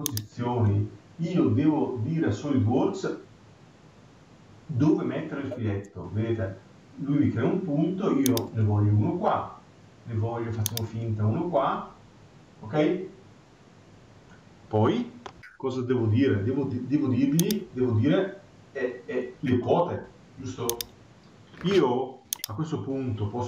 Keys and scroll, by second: 15.3 Escape.